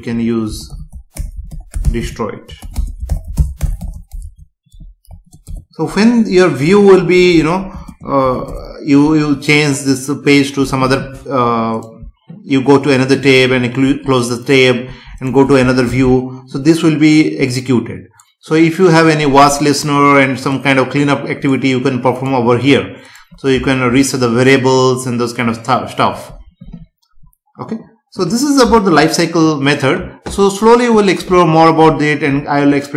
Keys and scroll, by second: 2.7 space, 5.4 Return, 6.6 Up, 7.3 End, 7.7 space, 8.4 Return, 15.9 ctrl+s.